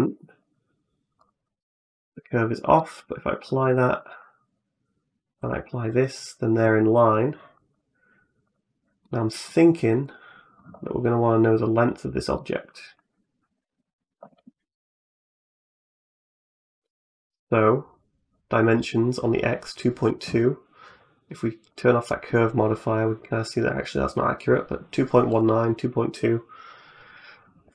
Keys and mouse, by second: 1.9 click, 2.6 middle click, 3.9 right click, 5.2 click, 6.6 click, 8.3 click, 8.9 middle click, 9.9 right click, 11.3 right click, 12.2 middle click, 13.3 n, 16.0 click, 21.5 click, 25.1 click.